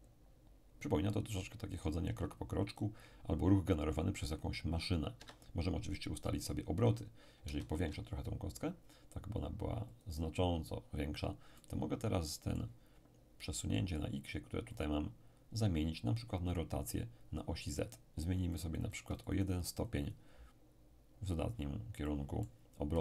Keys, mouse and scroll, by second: 5.2 Escape, 7.4 s, 9.9 ctrl+click, 10.5-11.2 ctrl+scroll down 2, 11.2-11.5 scroll down 1, 11.5-13.5 middle drag, 14.7 click, 17.7-21.1 drag, 22.0-23.0 middle drag.